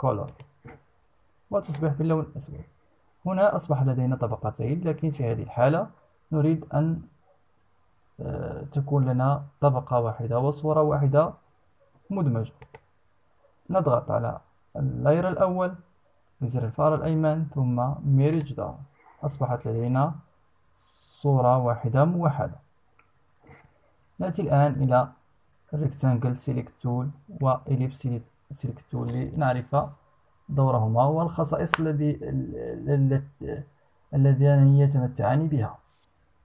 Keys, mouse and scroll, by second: 12.1 right click, 17.9 click.